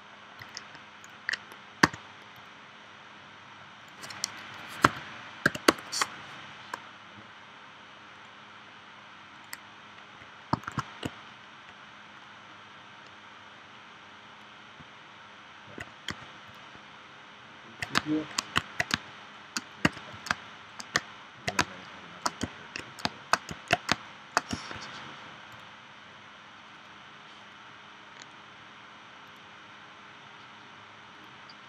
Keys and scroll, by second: 1.8 v, 4.8 3, 5.5 0, 5.7 Return, 10.6 shift+w, 16.1 v, 18.0 space, 18.9 space, 19.9 v, 20.3 space, 23.9 space.